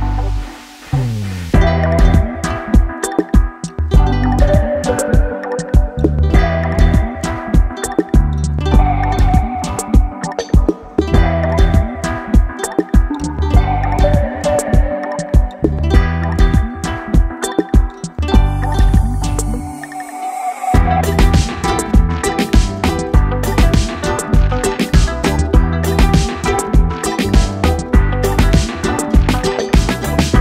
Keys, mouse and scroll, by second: 0.3 shift+a, 2.8-3.7 scroll up 9, 4.0 click, 5.2 click, 5.8 KP_0, 7.0 click, 10.5 click, 12.9 click, 13.9 click, 16.9 KP_1, 18.4 click, 19.6 click, 22.7 shift+a, 25.0 KP_7, 25.7-26.1 scroll down 1, 26.3 s, 28.1-28.5 scroll down 10, 28.8 click, 29.1 scroll down 2, 29.8 Tab.